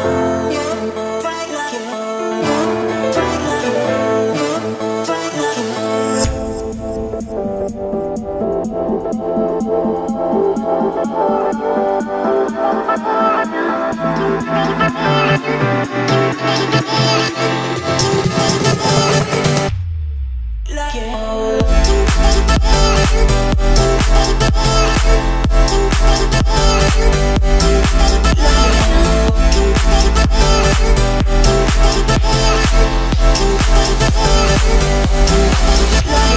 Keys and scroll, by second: 12.6 o, 15.5 Escape, 35.2 2, 36.0 2.